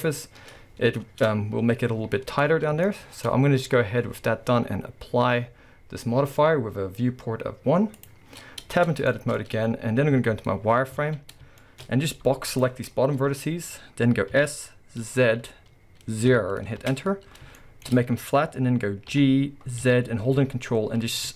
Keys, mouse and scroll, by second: 0.1-0.5 scroll down 2, 0.5-1.1 scroll up 2, 1.1 Tab, 2.2-2.8 scroll down 2, 2.8-8.0 shift+middle drag, 8.0 click, 8.8 Tab, 9.1-12.3 shift+middle drag, 9.4-10.1 scroll up 2, 10.1 z, 11.0 alt+a, 11.4-12.3 scroll up 4, 12.3 b, 14.4 s, 16.9 Return, 19.1 g.